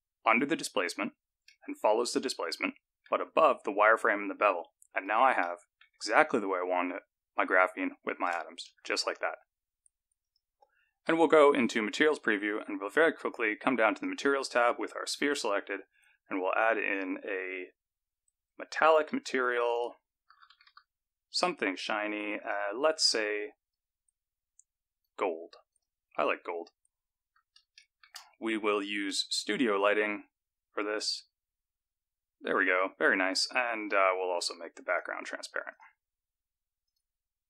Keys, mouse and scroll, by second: 0.5 click, 1.5 middle click, 4.9 click, 5.4 middle click, 8.7 KP_0, 10.2 click, 10.9 z, 14.0 click, 16.1 click, 18.6 click, 19.8 click, 22.4 click, 25.8 click, 26.2-26.8 scroll up 5, 27.8 shift+middle click, 29.1 click, 32.6-32.9 scroll up 2, 33.8 click, 34.9 click, 35.8 click, 36.9 click.